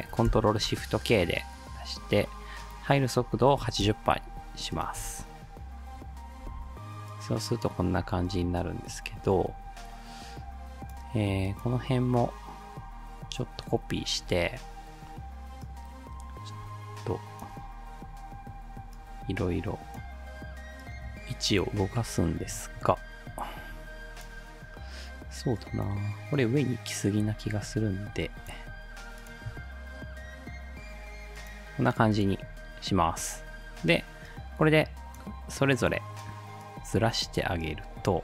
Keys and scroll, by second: 0.3 ctrl+shift+k, 3.3-5.0 typing, 6.5 space, 14.2 ctrl+d.